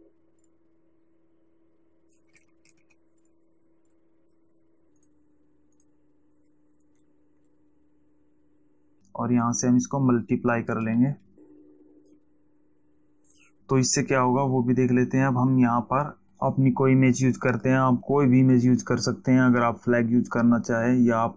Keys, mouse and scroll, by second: 0.7 click, 2.7 x, 3.2 z, 3.5 click, 4.2 click, 5.3 click, 6.1 click, 7.3 Down, 13.6 click.